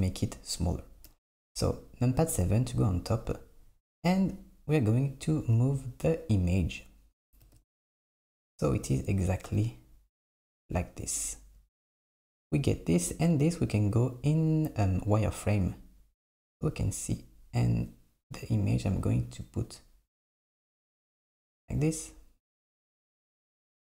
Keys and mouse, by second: 1.1 KP_7, 4.7 click, 7.4 g, 11.2 click, 15.1 click, 17.6 click, 19.6-22.6 drag, 22.7 click.